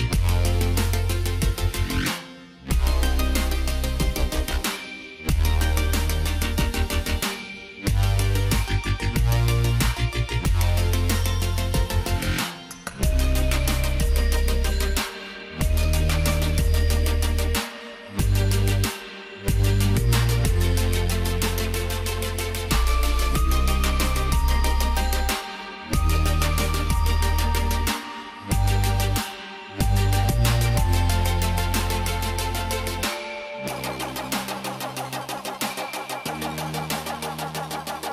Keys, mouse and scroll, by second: 6.2 click, 8.2 click, 11.2 BackSpace, 13.6 click, 22.9 click, 29.8 click, 36.8 click.